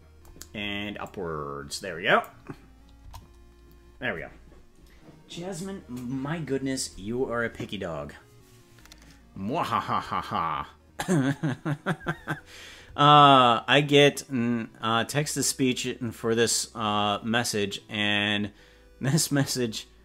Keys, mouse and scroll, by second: 1.0-2.2 drag, 2.9 KP_0.